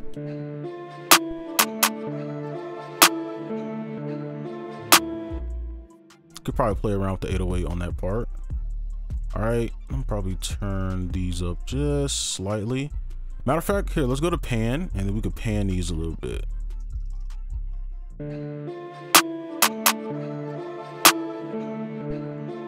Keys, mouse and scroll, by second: 0.2 space, 1.4 double click, 4.8 ctrl+click, 5.3 ctrl+Delete, 5.6 ctrl+a, 6.8 shift+click, 9.0 ctrl+right click, 9.8-10.4 alt+scroll up 1, 10.4-10.8 alt+scroll down 1, 10.8 ctrl+click, 12.2-14.6 alt+scroll up 1, 15.4 double click.